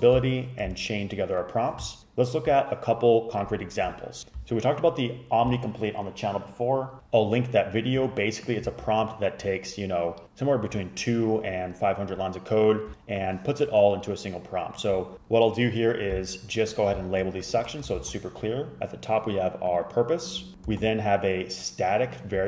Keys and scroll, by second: 8.8 super+a, 18.0 ctrl+c, 20.8 ctrl+c.